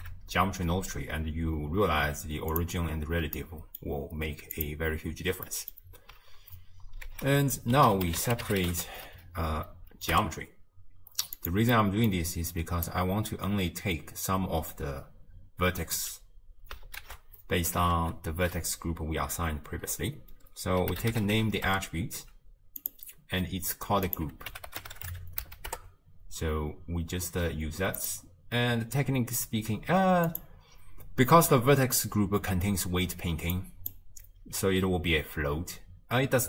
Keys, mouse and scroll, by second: 2.6 click, 3.4-5.0 middle drag, 5.0 click, 10.2 Down, 12.5-21.7 drag, 25.7-36.4 drag.